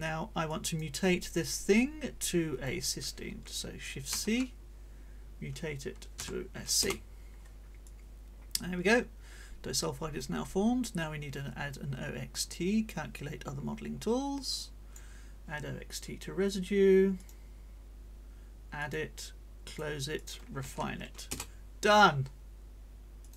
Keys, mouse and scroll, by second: 0.5 click, 1.8-2.8 drag, 4.1 shift+c, 6.2 c, 6.8 Return, 7.8-10.4 drag, 12.3-15.1 drag, 17.2 click, 18.8 click, 19.6 click, 20.2 shift+click, 20.6 shift+r, 21.2 Return, 23.2 click.